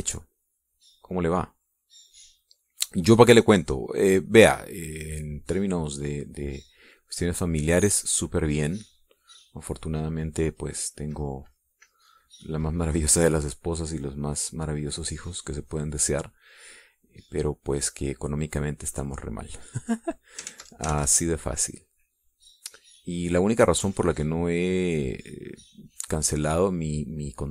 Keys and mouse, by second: 4.7-7.9 drag, 8.3 click, 9.3-10.9 drag, 11.1-15.3 drag, 15.9 click, 16.9 click, 18.1 click, 18.8 click, 19.7-21.3 drag, 21.7 ctrl+z, 22.5-23.7 ctrl+drag, 24.3-27.5 drag.